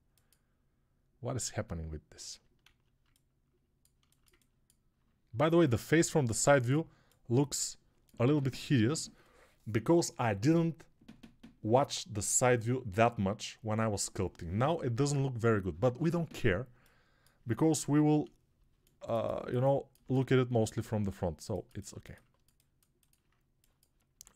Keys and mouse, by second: 2.5 alt+z, 17.8 Home, 24.0 Tab.